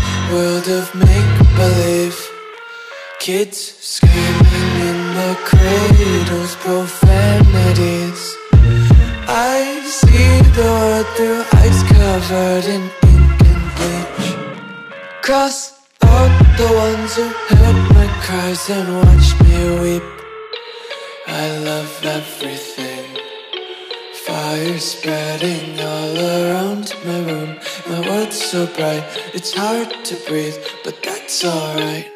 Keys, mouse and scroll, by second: 8.6 click, 8.9 scroll down 1, 10.1 click, 10.6 scroll down 1, 12.7 click, 13.2 scroll down 1, 14.1 ctrl+click, 16.3 click, 20.1 ctrl+click, 20.6 scroll up 1, 21.5 ctrl+click, 22.2 click, 25.8 Return, 30.3 click.